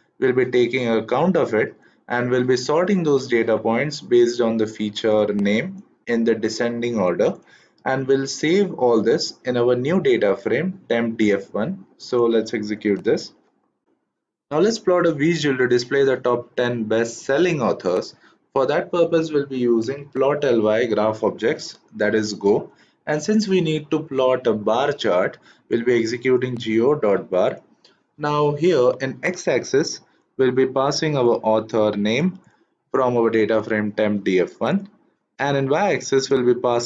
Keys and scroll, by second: 12.9 shift+Return.